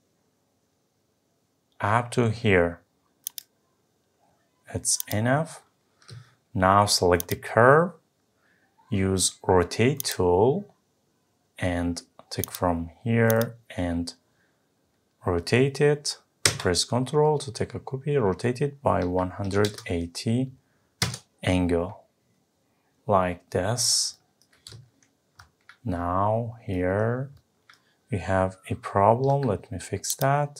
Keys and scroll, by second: 21.0 Return.